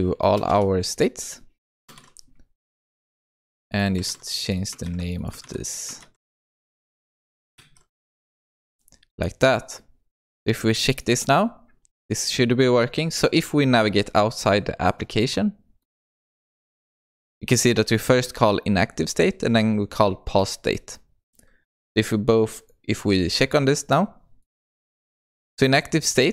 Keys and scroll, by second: 4.1 ctrl+c, 5.4 ctrl+v, 6.6 ctrl+c, 7.6 ctrl+v, 7.7 ctrl+s.